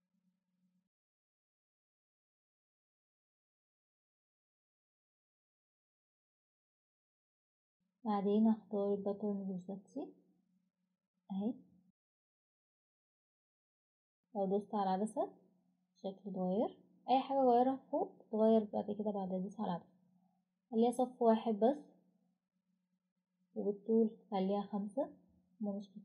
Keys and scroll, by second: 20.2 1.